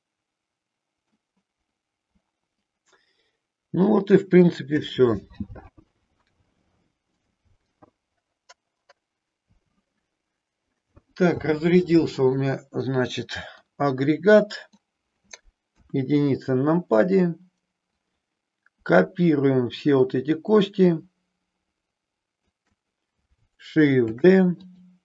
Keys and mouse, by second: 1.1-4.2 middle drag, 13.6-14.7 middle drag, 15.7 KP_1, 18.0-19.8 drag, 21.0-22.4 shift+drag, 24.1 shift+d, 24.6 click.